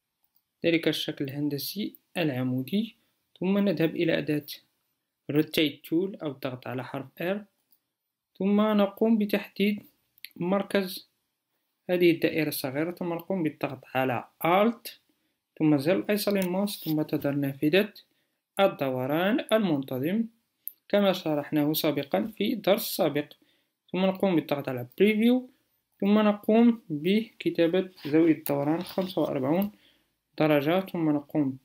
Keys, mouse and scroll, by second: 7.1 r, 15.1-20.2 alt+drag.